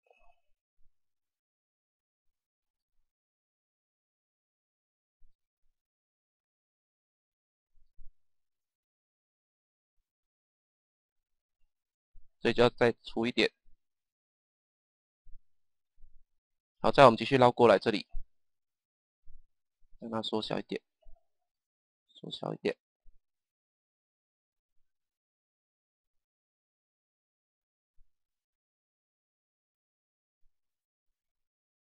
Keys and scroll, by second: 2.5 Page_Down, 5.2 Page_Down, 7.7 Page_Down, 13.5 Page_Down, 18.5 Page_Down, 21.3 Page_Down, 23.4 Page_Down, 28.7 Page_Down.